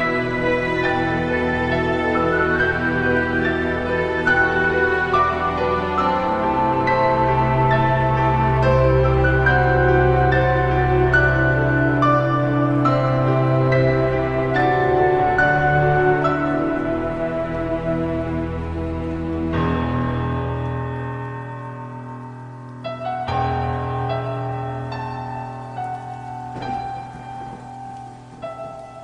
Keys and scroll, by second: 0.5 i, 1.3 i, 1.6 i, 6.5 -, 22.8 ctrl+z, 24.0 ctrl+z, 26.1 ctrl+z.